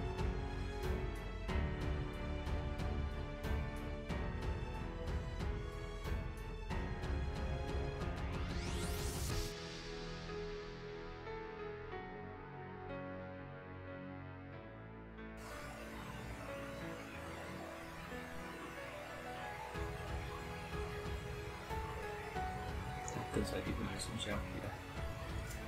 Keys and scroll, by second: 0.3 space, 1.6 super+j, 6.3 space, 7.0 alt+super+space, 7.3 alt+super+space, 7.8 super+space, 8.1 ⟲, 8.6 space, 11.0 space, 11.7 space.